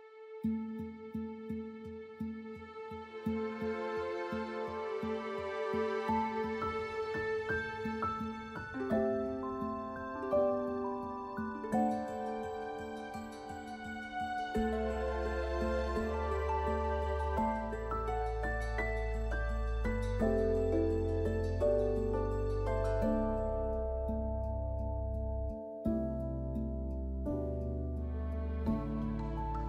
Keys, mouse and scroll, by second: 5.3 scroll up 1, 16.5 scroll down 1, 20.0 scroll up 1, 24.3 scroll down 1, 24.6 scroll up 1, 25.2 scroll down 1, 25.4 scroll up 1, 28.2 scroll down 1.